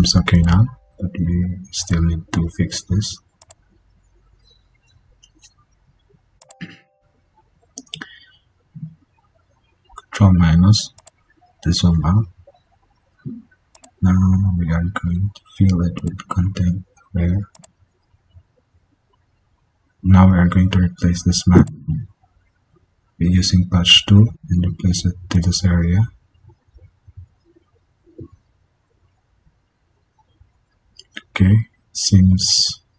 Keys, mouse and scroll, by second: 4.7 ctrl+d, 8.2 ctrl+-, 19.6 ctrl+d.